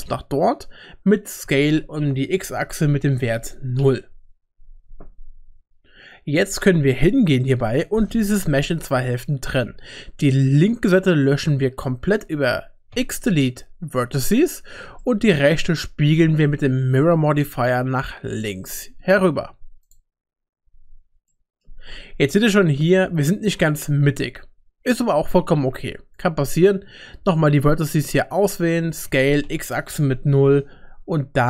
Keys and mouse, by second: 1.4 s, 7.6 KP_7, 10.5-11.8 drag, 12.9 x, 14.3 typing, 15.0 middle click, 17.3 click, 18.3-19.9 drag, 20.6 Tab, 21.3 middle click, 24.0 Tab, 26.1-28.6 drag, 29.1 s.